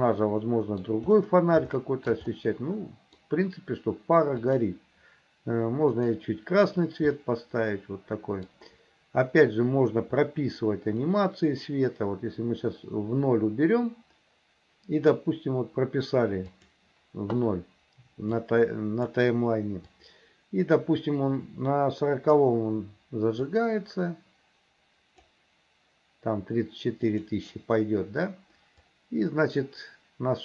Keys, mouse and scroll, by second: 0.0 middle click, 1.8 shift+middle click, 2.4 middle click, 4.5 click, 7.2-8.5 middle drag, 11.2-15.2 drag, 16.6-18.3 drag, 18.4 click, 20.0-22.4 drag, 23.5-25.3 drag, 27.1 click, 29.0-30.4 drag.